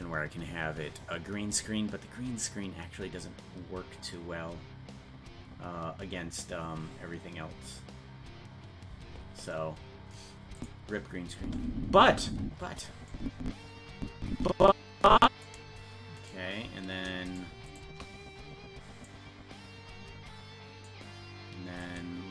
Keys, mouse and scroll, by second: 10.6 click, 11.4 space, 13.1-15.4 drag, 16.2 right click, 17.3 shift+right click, 19.0-20.9 drag, 21.8-22.3 drag.